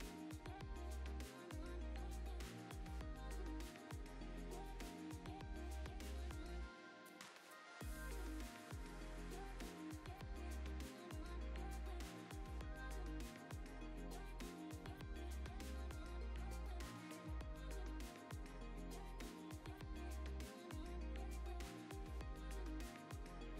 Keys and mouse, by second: 1.1 g, 1.2 z, 1.3 click, 2.3 click, 2.6-2.9 drag, 3.1 click, 3.5 KP_0, 4.1 z, 5.3 click, 5.5-11.6 typing, 5.9 click, 6.8 click, 8.6 click, 9.0 click, 9.8 click, 9.9 alt+d, 12.7 g, 13.0 shift+z, 13.5 click, 14.2-14.7 drag, 16.7-18.4 drag, 18.7 click, 19.7 click, 20.0 click, 20.5 click, 20.9 click, 22.6 click.